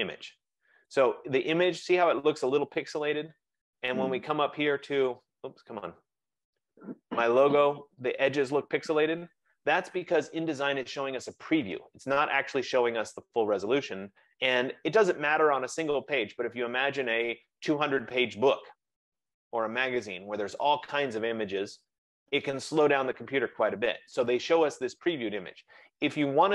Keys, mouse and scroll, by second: 0.5-0.8 scroll, 1.1 click, 4.9-6.9 click, 5.5 typing, 6.2-6.6 scroll, 7.0 click, 7.2 click.